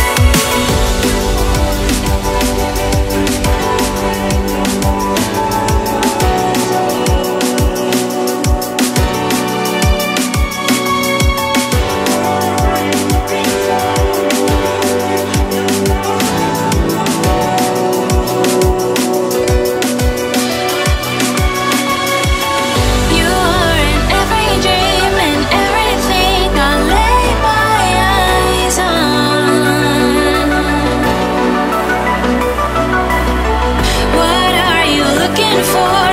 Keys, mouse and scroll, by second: 0.2 click, 1.0 click, 3.2 click, 4.2 scroll down 1, 5.7 click, 11.9 s, 13.1 g, 18.1 Tab, 18.8 3, 19.5 click, 20.5 shift+s, 21.6 shift+a, 23.5 s, 26.6 click, 27.7 click, 28.4 shift+s, 29.3 shift+s, 30.9 shift+a, 32.5 s, 34.6 click, 35.8 scroll up 2.